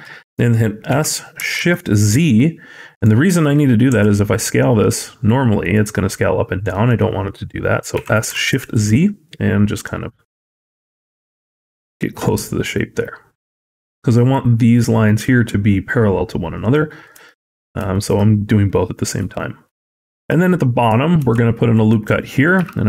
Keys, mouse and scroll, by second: 0.7 s, 3.7 s, 7.8 s, 12.0 scroll up 1, 12.5 shift+middle click, 13.3 shift+scroll up 1, 13.4-17.0 scroll down 3, 17.1 shift+middle click, 17.3 scroll up 2, 17.8 shift+middle click, 18.6 scroll down 3, 18.8 scroll up 2, 19.2 shift+middle click, 19.7 scroll up 1, 20.0 shift+middle click, 20.2-20.7 scroll up 2, 21.0 ctrl+r, 22.4 s.